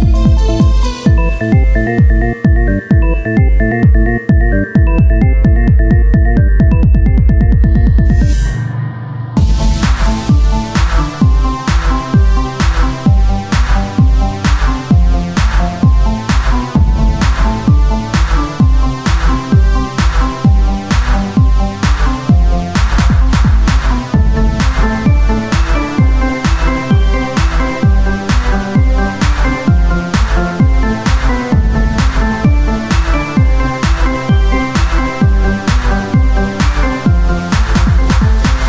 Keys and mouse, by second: 4.7 z, 7.5-8.9 drag, 7.5 z, 9.5 z, 10.0 z, 10.3 Tab, 18.3 click, 18.7 Tab, 19.4 KP_1, 19.9 ctrl+Tab, 20.7 z, 21.5 z, 22.1 click, 22.1 z, 22.1 c, 23.6-25.3 drag, 23.6 c, 23.8 z, 24.6 shift+d, 30.8-33.7 drag, 31.8 z, 33.3 z, 33.7 z, 34.6 r.